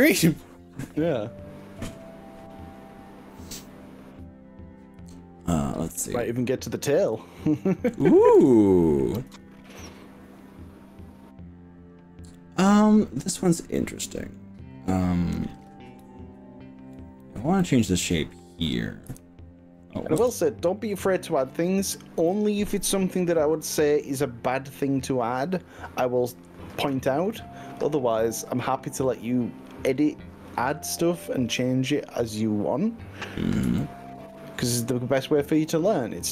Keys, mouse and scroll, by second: 5.1-5.7 scroll up 3, 5.9-7.1 middle drag, 7.3 shift+middle click, 8.4-14.1 middle drag, 14.3 click, 16.1 z, 17.6-18.6 middle drag, 19.1 KP_1, 20.2 KP_3, 28.9-29.5 scroll down 2, 32.9 scroll down 1, 33.4 scroll up 1, 33.8-34.9 shift+middle drag.